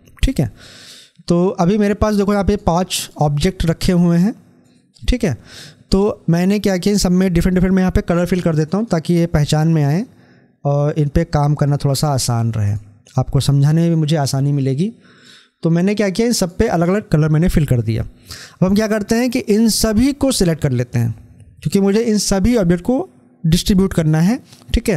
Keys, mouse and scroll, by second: 0.7 scroll up 1, 19.6-23.4 drag.